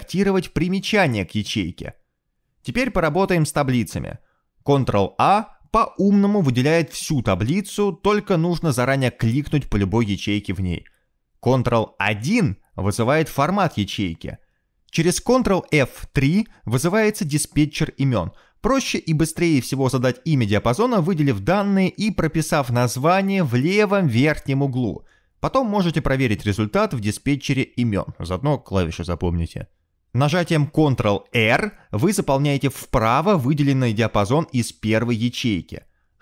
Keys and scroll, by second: 1.4-2.6 typing, 3.4 Escape, 9.8 ctrl+a, 11.0 ctrl+a, 12.6 ctrl+a, 14.7 ctrl+1, 18.5 ctrl+F3, 23.6-25.3 typing, 25.7 Return, 27.1 ctrl+F3, 27.2-28.0 typing, 30.6 typing, 35.8 ctrl+r.